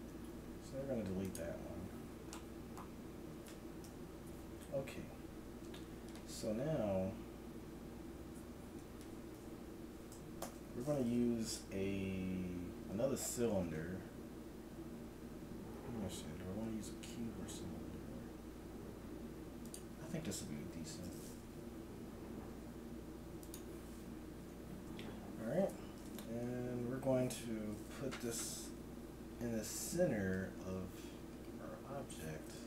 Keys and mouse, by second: 0.3 x, 0.8-2.0 drag, 3.8 KP_1, 7.0-8.8 middle drag, 8.8 Tab, 10.4 shift+a, 22.5 g, 24.5 Tab, 26.3 KP_Decimal, 28.3 g.